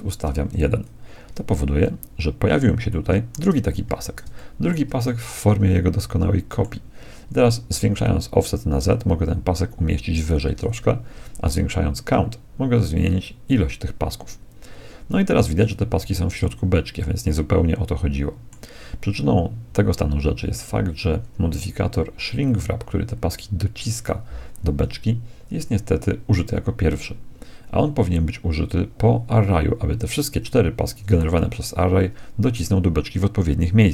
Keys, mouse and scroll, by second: 1.8-6.9 middle drag, 3.9 z, 8.0-9.9 drag, 10.5-12.6 middle drag, 12.9-15.2 drag, 15.9 z, 16.5-18.3 middle drag, 31.3 z.